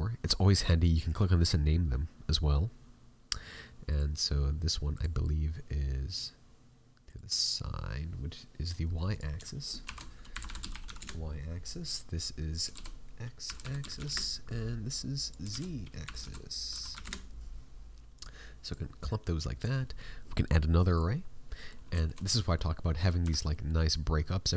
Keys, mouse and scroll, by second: 4.8 click, 12.4 click, 21.5 middle click, 21.9 shift+middle click, 22.1 middle click, 23.2 a, 23.5 middle click.